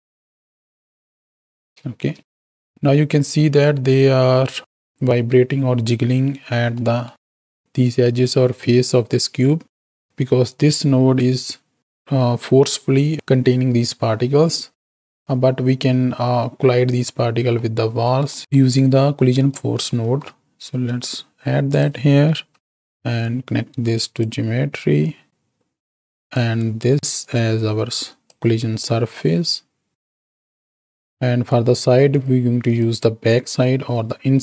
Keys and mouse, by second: 2.6 space, 6.9 middle click, 10.5-14.4 drag, 17.6 middle click, 19.4 click, 20.0 shift+d, 22.5 alt+p, 23.2-24.3 drag, 25.0-26.4 drag, 27.3-28.2 drag, 28.8-29.9 drag, 29.9 middle click, 30.9 click, 31.2 middle click, 32.1 click, 32.6 click, 33.3 click.